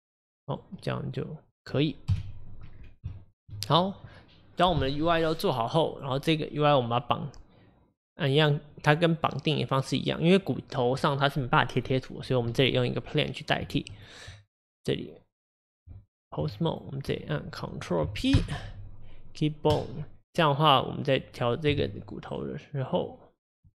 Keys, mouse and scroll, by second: 0.5 click, 0.9-2.1 middle drag, 2.1 KP_1, 2.7-3.1 scroll down 2, 3.1-3.9 shift+middle drag, 3.9 click, 6.0 click, 6.8-7.2 scroll up 3, 14.0 click, 14.2 Tab, 14.2 Tab, 16.5 Tab, 16.7 drag, 19.8 ctrl+p, 20.3 click, 20.8 click, 21.7 g, 23.0 click.